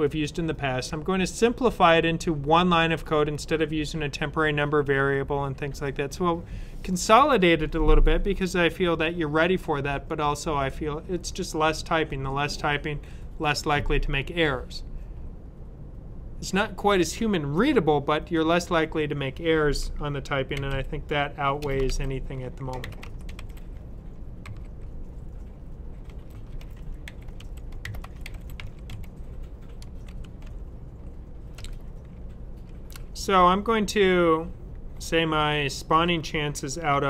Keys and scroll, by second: 20.4 typing, 21.5-23.3 typing, 24.4 typing, 26.0-28.8 typing, 30.0-30.3 typing, 31.4 typing, 33.2-33.6 typing.